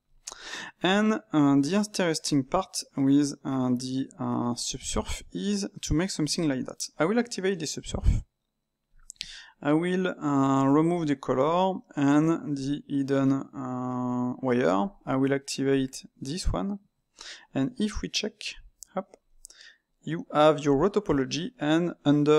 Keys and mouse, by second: 0.1 click, 1.1 click.